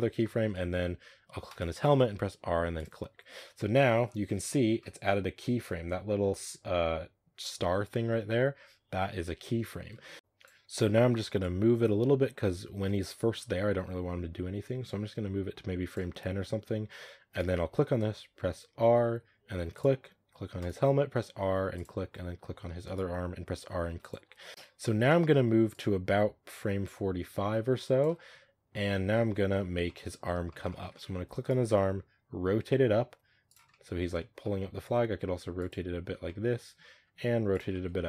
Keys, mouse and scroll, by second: 0.1-1.3 shift+middle drag, 1.3 right click, 2.3 r, 9.6 scroll down 3, 9.9 shift+middle drag, 10.1-14.3 drag, 16.5-17.0 scroll up 1, 17.2 right click, 19.0 r, 20.4 right click, 21.1 r, 22.7 right click, 23.4 r, 24.5-29.0 drag, 29.0-29.5 middle drag, 29.5 scroll up 3, 29.7-31.3 middle drag, 31.3 right click, 31.8 r, 33.6-34.0 middle drag, 34.0 scroll down 2, 34.3 middle click, 34.7 r, 36.1-36.9 middle drag, 36.9 r, 37.6 middle drag, 37.8 scroll down 1.